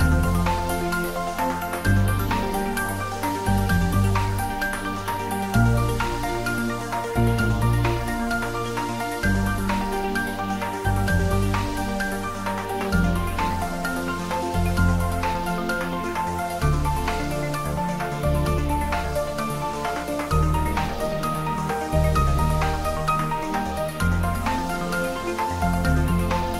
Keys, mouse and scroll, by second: 0.3 click, 0.4 Tab, 1.3 click, 1.7-2.6 typing, 4.0 click, 4.5 ctrl+s, 4.8 shift+z, 6.2 ctrl+s, 7.1 g, 7.9 z, 8.6 click, 9.0 ctrl+s, 9.5 click, 10.5 ctrl+s, 11.5 ctrl+middle click, 12.3 click, 12.4 Tab, 12.8 ctrl+middle click, 13.5 shift+click, 14.0-15.2 middle drag, 16.2 middle click, 17.3 click, 17.8 shift+z, 18.6-20.7 shift+middle drag, 20.7 ctrl+click, 21.5 shift+click, 22.3-24.3 shift+drag, 24.3-24.7 typing.